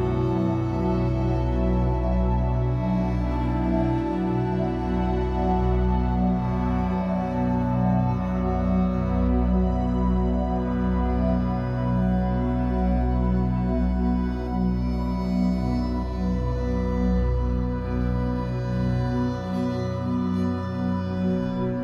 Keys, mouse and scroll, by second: 1.9 click, 2.2 click, 2.9 click, 3.1-6.1 drag, 6.8 BackSpace, 8.3 s, 11.8-12.3 scroll down 2, 12.3 middle drag, 12.5-13.1 scroll up 1, 13.1 click, 14.0-15.2 drag, 15.4-15.7 scroll down 3, 15.7 ctrl+s, 16.0-16.3 shift+middle drag, 16.3 click, 16.5 b, 17.0 o, 19.4 o, 21.3 ctrl+s.